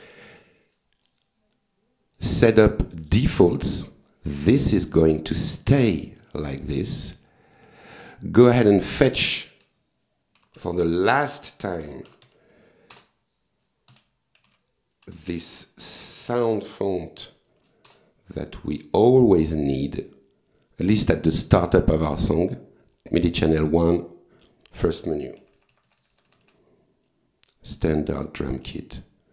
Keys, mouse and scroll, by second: 0.7 click, 1.5 click, 2.9 click, 3.6 click, 7.1 click, 9.0 click, 9.4 click, 10.2-15.0 typing, 11.3 Return, 12.9 Return, 15.9 Return, 17.2 f, 17.9 Return, 19.3 click, 24.0 click, 25.4 Page_Down, 28.0 click.